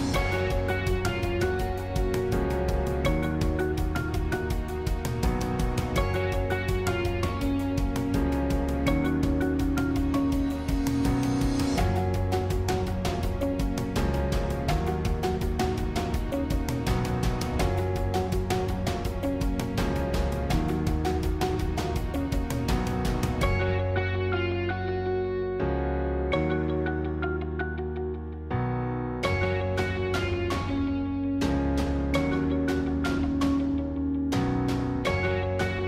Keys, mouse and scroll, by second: 12.0-13.5 middle drag, 13.5 e, 15.1-17.0 middle drag, 17.0 click, 17.6-19.0 middle drag, 19.0 click, 19.4 scroll down 1, 19.6-21.0 middle drag, 21.0 shift+d, 25.4-26.8 middle drag, 26.8 e, 29.2-30.5 middle drag, 30.5 typing, 32.8 middle click, 33.6 e, 35.5-35.8 middle drag.